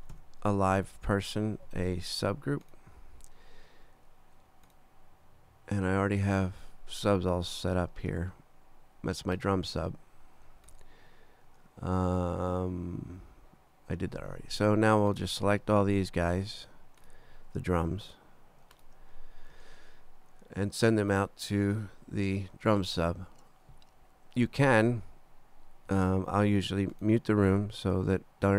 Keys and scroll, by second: 0.0-0.6 typing, 1.0 shift+Return, 1.6 Return.